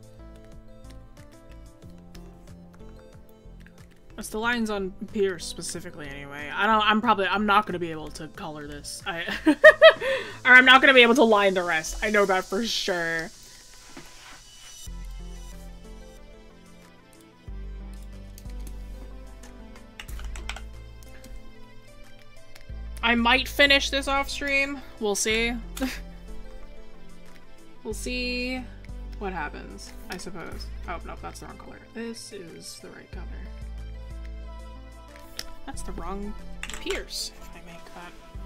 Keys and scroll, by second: 3.4-4.2 scroll up 1, 4.2 scroll down 1, 8.0 scroll down 1, 9.3 scroll up 1, 10.7 scroll down 1.